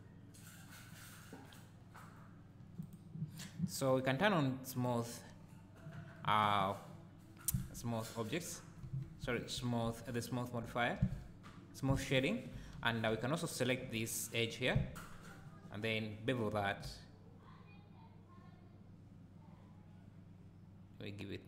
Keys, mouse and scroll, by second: 3.8-4.8 right drag, 5.4-7.2 scroll down 2, 7.2 scroll down 1, 7.5 Tab, 8.4-8.8 scroll up 2, 8.8-12.0 right drag, 8.9 Tab, 11.0 2, 12.0 alt+click, 12.8 scroll down 1, 13.1 `, 16.3 ctrl+b.